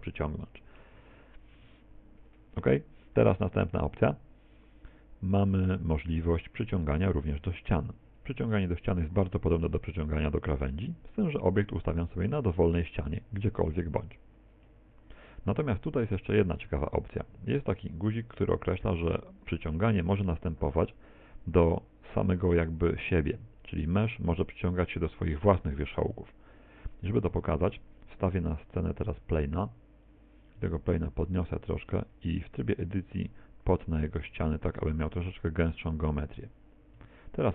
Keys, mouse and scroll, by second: 5.8 click, 9.1 g, 27.4 right click, 28.0 click, 29.2 shift+a, 31.0 click, 31.9 Tab, 37.0 Tab.